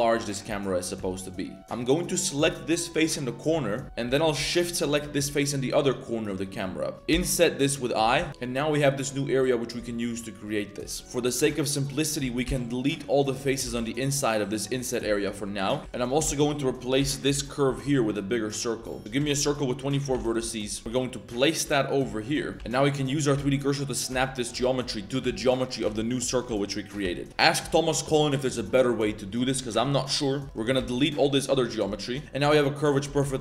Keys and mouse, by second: 0.2 click, 0.5 Tab, 0.9 Tab, 1.1 click, 1.6 z, 2.0 click, 3.1 z, 3.6 shift+middle click, 4.0 z, 5.0 z, 7.1 i, 8.1 z, 8.3 shift+click, 9.3 z, 9.8 z, 11.0 shift+click, 12.0 ctrl+shift+click, 12.4 x, 13.6 1, 15.4 shift+middle click, 15.8 z, 15.8 shift+d, 16.2 s, 17.9 z, 18.7 z, 19.0 shift+a, 19.2 r, 20.8 g, 22.5 shift+middle click, 22.5-27.6 typing, 22.9 middle click, 23.9 click, 24.4 click, 25.1 click, 25.6 click, 26.3 click, 26.8 click, 30.4 c, 30.7 x, 31.4 z, 31.9 click, 32.1 x, 33.2 shift+click.